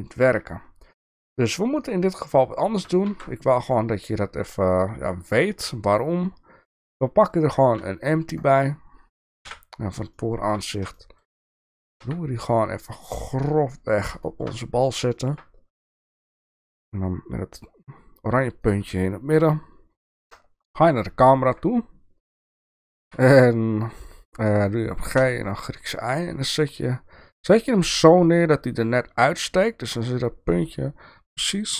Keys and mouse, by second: 2.1 click, 3.1 shift+a, 9.4 KP_1, 10.1-10.5 shift+middle drag, 10.9 shift+middle drag, 12.0 g, 14.2 shift+middle click, 15.1 shift+middle click, 16.2 g, 20.2 KP_0, 21.2-21.6 shift+middle drag, 23.0 g.